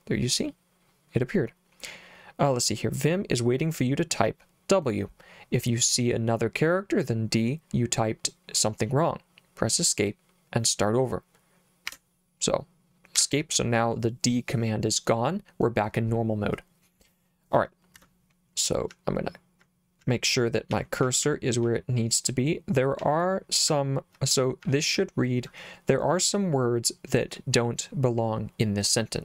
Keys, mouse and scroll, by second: 11.9 Escape, 13.2 Escape, 18.0 Escape, 18.9 h, 20.0-24.6 typing.